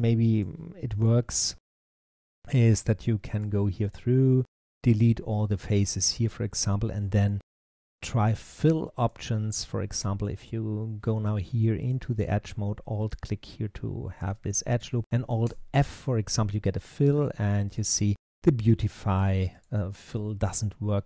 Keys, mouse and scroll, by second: 0.2 click, 0.8 click, 1.1 shift+click, 2.0 shift+click, 3.2 shift+click, 3.7 shift+click, 4.5 x, 6.9-8.9 middle drag, 8.9 click, 10.0 alt+click, 11.7 click, 12.8 alt+click, 13.9-15.3 middle drag, 15.3 alt+f, 17.5 click, 18.0 click, 19.0 click, 19.4 click, 19.8-21.0 middle drag.